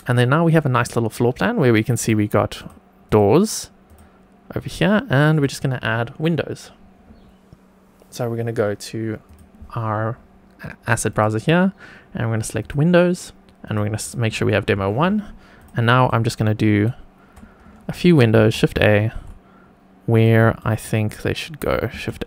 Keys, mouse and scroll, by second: 1.9 click, 2.5 click, 3.0 click, 3.8 click, 4.5 click, 5.3 click, 9.2-10.2 drag, 11.0-12.7 drag, 13.6 click, 15.5 click, 16.0 shift+right click, 18.3 shift+a, 20.1 click, 20.6-21.4 shift+right drag, 21.9 shift+a.